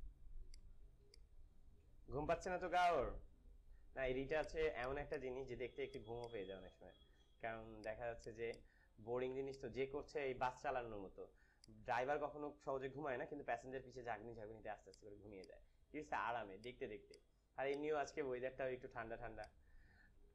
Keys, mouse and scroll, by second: 4.7-7.9 alt+drag, 8.1 alt+click, 8.7 click, 9.3 space, 9.7 click, 9.8 space, 11.5 ctrl+click, 13.2 s, 14.8 alt+click, 14.8 alt+click, 16.5 alt+click, 17.0-19.0 alt+drag, 19.0 space, 19.4 click, 19.6 space.